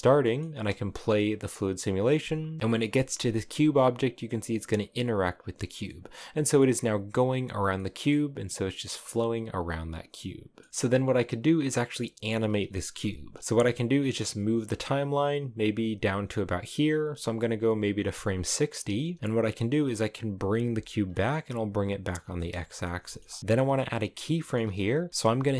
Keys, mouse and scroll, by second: 0.0 middle click, 0.2 space, 1.0-1.5 scroll down 1, 2.6 middle click, 3.1 scroll up 3, 5.5 scroll down 2, 5.7-13.4 middle drag, 13.4-16.4 drag, 16.8-20.1 drag, 20.1 g, 22.2 shift+middle click, 22.3 scroll up 1, 22.5 middle click, 22.6 g, 23.4-25.5 middle drag.